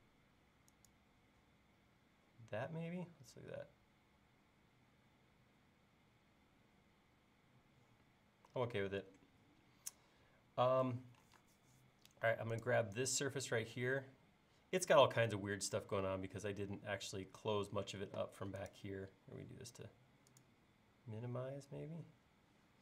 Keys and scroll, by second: 10.6 l, 18.1 l.